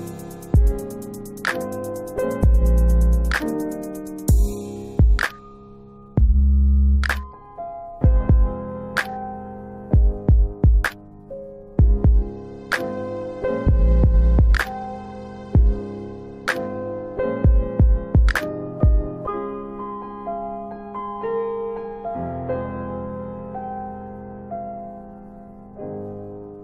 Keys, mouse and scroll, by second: 1.1 click, 3.5 ctrl+BackSpace, 4.3 click, 4.8 ctrl+BackSpace, 8.0 click, 10.4 typing, 11.9 click, 16.4-17.0 scroll down 1, 17.0 F4, 17.2-18.4 scroll down 2, 19.4-20.4 scroll down 2, 20.4-21.0 scroll up 3, 21.0 click, 22.1 typing, 23.1 click, 25.5 alt+middle click, 25.9 middle click.